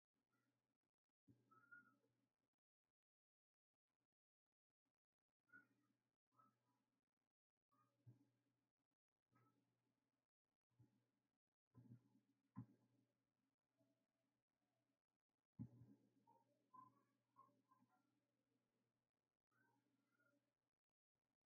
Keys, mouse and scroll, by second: 0.0-3.2 drag, 3.2-8.9 right drag, 15.8-21.4 shift+right drag.